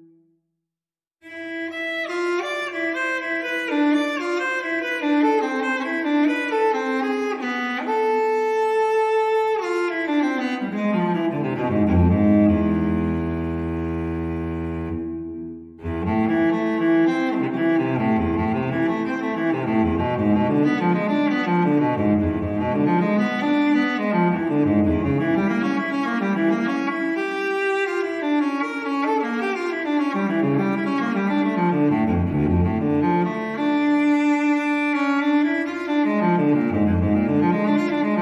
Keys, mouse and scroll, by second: 1.4 click, 3.1 click, 3.8 click, 4.6 click, 8.3 click, 10.2 click, 14.2 click, 16.7 click, 19.7 click, 21.2 click, 22.2 click, 23.5 click, 24.3 click, 24.8 click, 25.7 click, 26.3 click, 27.2-29.5 drag, 29.5-30.1 scroll down 1, 30.1-30.6 scroll up 1, 30.8-31.9 middle drag, 32.4 0, 33.1-33.6 scroll down 2, 34.6 ctrl+click, 35.4 ctrl+click, 36.6 ctrl+click.